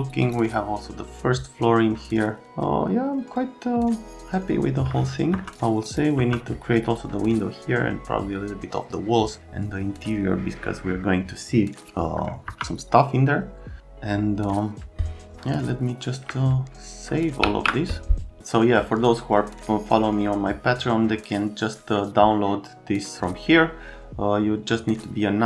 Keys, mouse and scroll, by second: 0.2 click, 5.3 F3, 5.9 click, 6.2 F3, 12.5 F3, 17.4 ctrl+s.